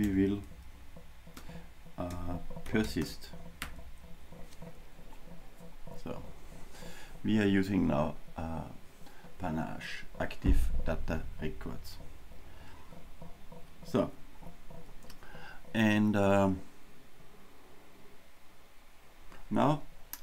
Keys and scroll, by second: 1.4 Return.